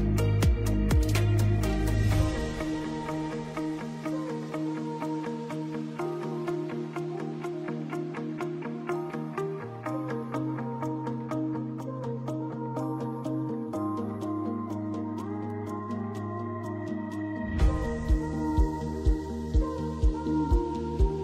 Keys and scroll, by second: 1.0 F8, 1.2 BackSpace, 2.7 shift+g, 3.8-8.8 typing, 9.6 ctrl+space, 19.5 ctrl+space.